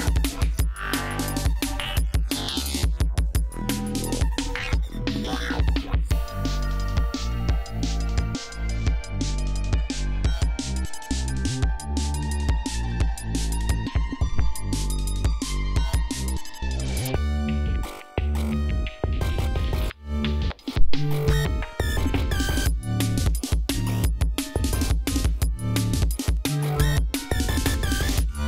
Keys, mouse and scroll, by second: 5.0-6.0 scroll up 4, 6.4 ctrl+scroll down 2, 7.6 ctrl+click, 9.7 click, 10.2 click, 11.2-13.3 scroll up 11, 13.5 ctrl+scroll down 2, 14.1 ctrl+scroll up 2, 17.8 ctrl+scroll down 2, 18.3 ctrl+scroll up 2, 19.7 ctrl+scroll down 2, 20.1 ctrl+scroll up 2, 26.9 ctrl+scroll down 2, 27.2 ctrl+scroll up 2.